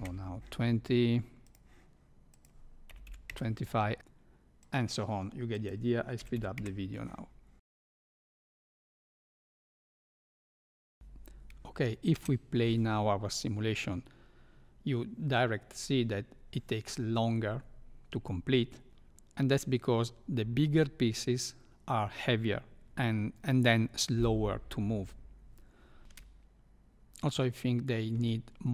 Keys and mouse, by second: 1.4 click, 2.4-3.7 drag, 5.5-7.0 drag, 7.8 click, 8.4 click, 8.7 click, 8.9 click, 9.6 click, 9.7 KP_5, 10.2 click, 10.7 click, 10.9 shift+Left, 10.9 space, 12.1 space, 26.0 shift+Left, 26.0 space, 28.1 space.